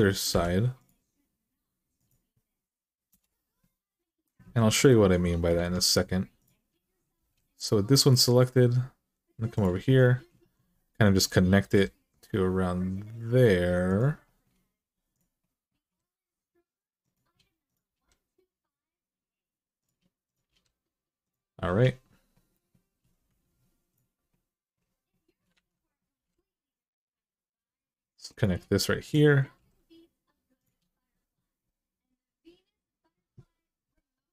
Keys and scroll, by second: 0.1 k, 2.7 k, 2.9 Return, 5.3 alt+z, 7.0 g, 11.4 g, 15.6 g, 17.6 g, 20.2 g, 23.2 alt+z, 25.3 alt+z, 26.0 g, 29.3 g, 32.0 g.